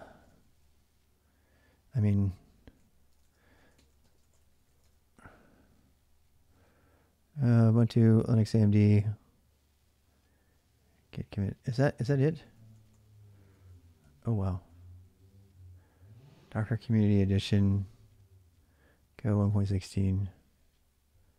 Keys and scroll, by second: 0.2 ctrl+a, 0.4 ctrl+a, 2.3-5.0 typing, 12.3-14.5 typing.